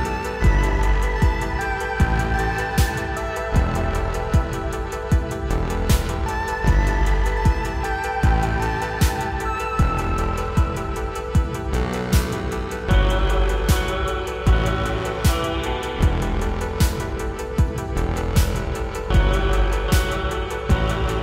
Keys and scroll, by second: 14.3 Tab.